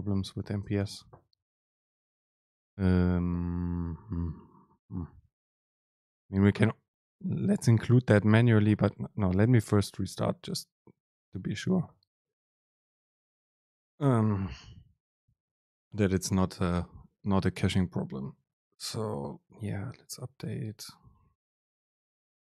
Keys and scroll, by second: 0.4 super+space.